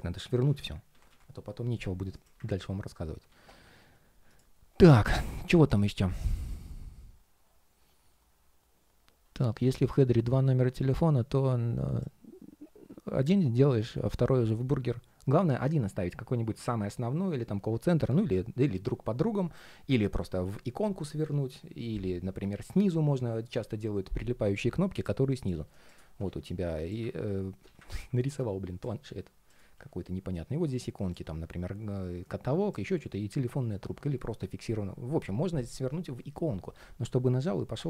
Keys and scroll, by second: 3.0 super+s.